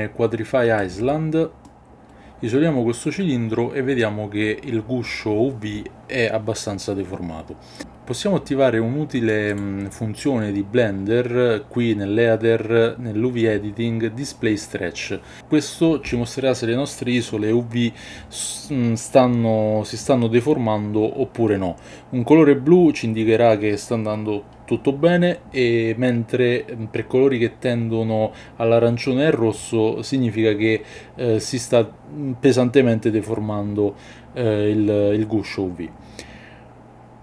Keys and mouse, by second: 2.1-9.5 middle drag, 9.5-15.2 drag.